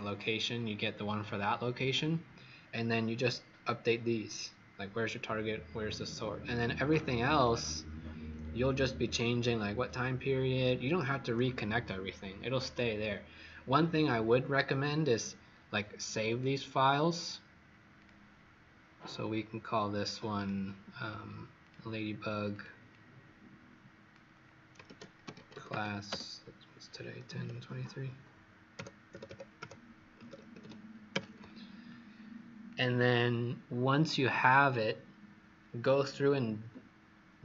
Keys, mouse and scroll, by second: 2.5-2.8 scroll down 2, 3.1-4.1 scroll up 5, 4.1-5.0 scroll up 1, 7.0-7.5 scroll down 4, 7.9-8.8 scroll down 2, 8.8-11.1 scroll up 5, 11.1-11.4 scroll down 2, 13.5-14.8 scroll down 4, 16.2 click, 22.8 click, 24.6-26.2 typing, 27.2 KP_1, 27.4 KP_0, 28.7 KP_Subtract, 29.1 KP_2, 29.2 KP_3, 32.6 click.